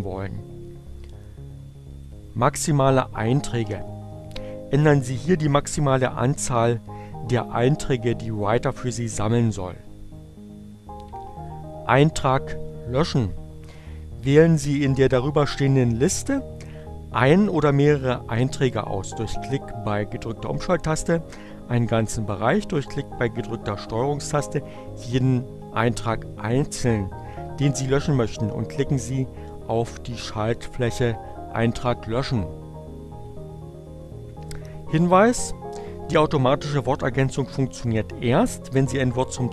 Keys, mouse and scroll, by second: 1.8 click.